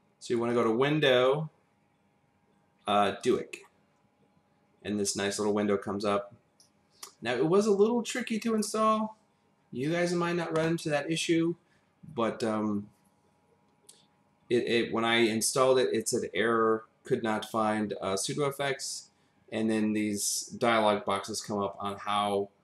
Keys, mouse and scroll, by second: 0.5 click.